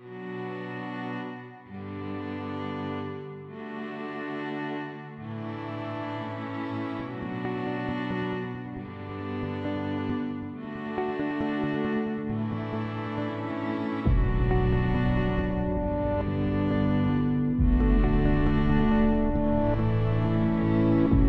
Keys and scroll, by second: 4.8 1.